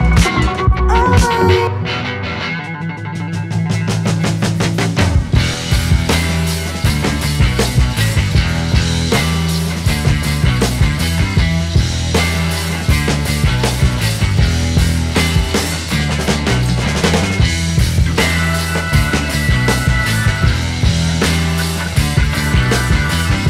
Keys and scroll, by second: 2.8 ctrl+r, 3.3 Escape, 13.9 space, 14.8 Escape, 16.0 F3, 17.4 F2.